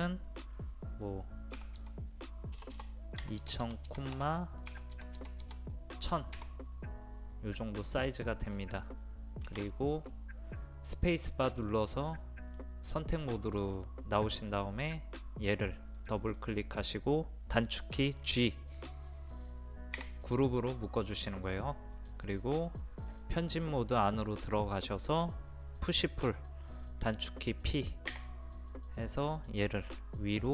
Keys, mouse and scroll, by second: 1.6-3.4 typing, 4.7 KP_1, 5.0 KP_0, 7.8 middle click, 8.5-8.8 scroll up 1, 10.0-11.4 scroll down 1, 11.4 middle click, 16.0 click, 20.0 a, 22.0 click, 28.1 p, 29.2 click.